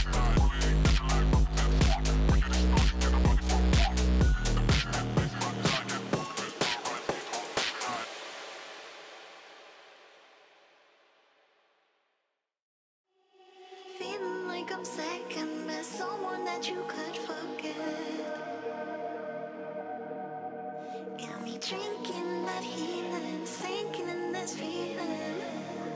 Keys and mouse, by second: 0.0-2.0 typing, 0.4 Tab, 1.0-1.4 drag, 2.2 Tab, 2.4 click, 2.8-3.9 drag, 5.3 z, 5.6 shift+middle click, 5.8 Tab, 6.0 a, 6.1 s, 6.5 `, 6.9 click, 7.2 click, 7.5 click, 9.6 3, 9.6 click, 10.0 2, 10.3 e, 12.0 ctrl+z, 12.1 ctrl+z, 12.3 click, 12.7 e, 13.9 1, 14.2 click, 14.8 drag, 15.1 click, 15.5 click, 15.9 middle click, 16.4 shift+click, 16.7 click, 17.5-18.3 drag, 18.3 Tab, 19.9 click, 20.3-21.4 drag, 21.9 click, 23.6-24.0 middle drag, 24.2 middle click, 25.7 click.